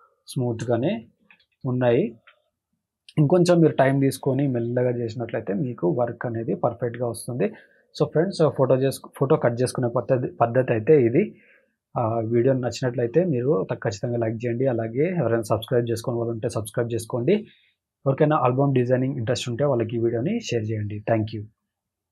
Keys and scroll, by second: 1.1 ctrl+-.